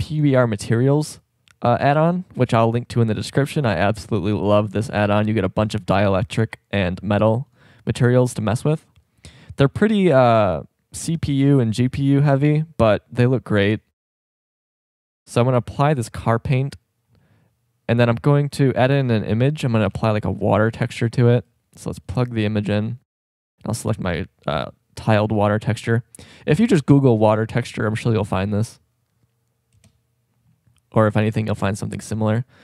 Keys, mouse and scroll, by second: 1.0-4.2 middle drag, 7.5-10.6 drag, 14.6-17.2 middle drag, 18.9 shift+a, 22.0-25.3 drag, 29.8 KP_0, 31.0-31.4 right drag.